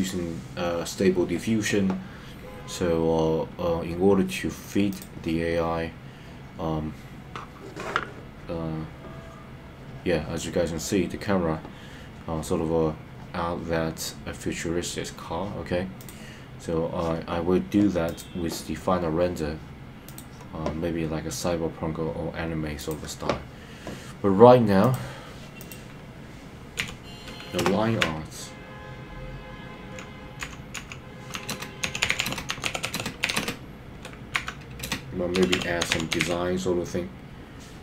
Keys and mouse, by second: 4.9 click, 16.1 click, 20.3 click, 24.9-37.8 drag.